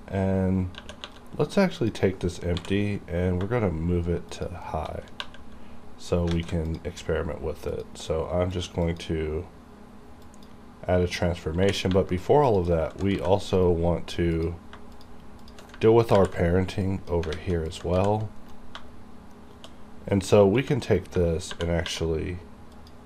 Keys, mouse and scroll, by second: 0.8 2, 1.8 click, 1.8 3, 1.9 click, 2.5 m, 4.4 shift+click, 5.2 2, 6.4 alt+a, 6.7 click, 8.9 click, 8.9 click, 10.2 click, 11.6 2, 12.4 click, 13.2 g, 13.6 right click, 14.4 click, 14.4 click, 15.0 shift+click, 16.1 p, 16.8 click, 17.3 alt+a, 17.7 click, 18.0 g, 18.4 right click, 20.7 g, 20.9 right click, 21.5 shift+@, 22.7 shift+click, 22.8 shift+click.